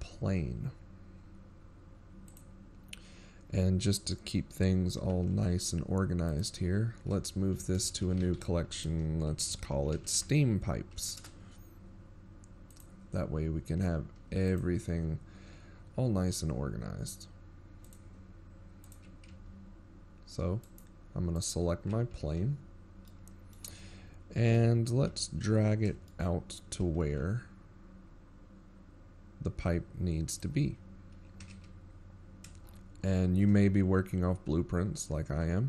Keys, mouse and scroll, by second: 15.1 click, 18.6 click, 19.5 click, 20.0 z, 21.4 right click, 22.1 right click, 23.0 z, 23.9 middle click, 25.3 KP_7, 25.8 z, 26.3 scroll up 4, 26.9 shift+middle click, 27.9 g, 32.4 KP_1, 33.6-34.4 shift+scroll down 16.